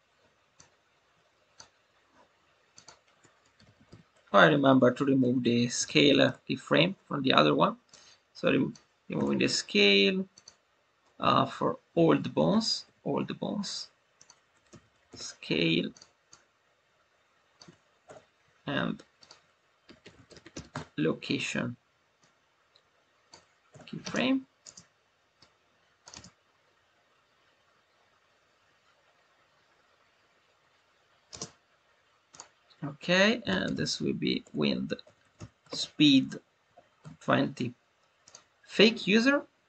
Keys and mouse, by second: 2.8-6.9 drag, 7.8 click, 9.1 Delete, 10.3-12.6 drag, 14.2-15.9 drag, 16.2-17.5 drag, 18.0 Delete, 19.1-21.1 drag, 22.1-23.3 drag, 23.6 Delete, 24.5 space, 25.3-25.9 drag, 31.2 space, 32.2-37.7 drag.